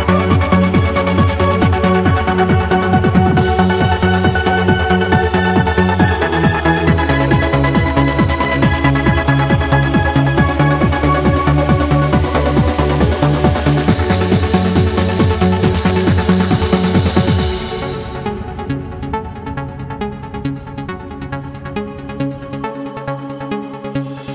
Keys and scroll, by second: 9.5 e, 11.1 n, 11.7 w, 20.3 q.